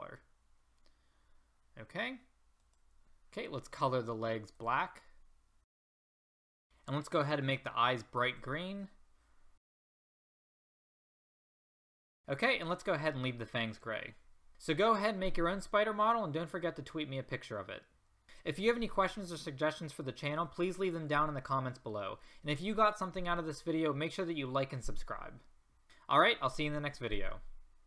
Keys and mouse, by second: 2.7-5.7 drag, 5.9 click, 6.6 a, 9.6 click, 9.9 a, 10.1 click, 11.9 click, 12.1 a.